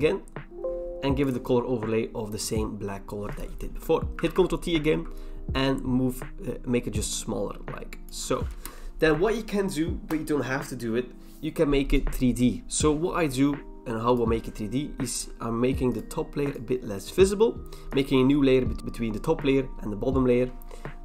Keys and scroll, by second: 4.2 ctrl+t, 8.5 Return.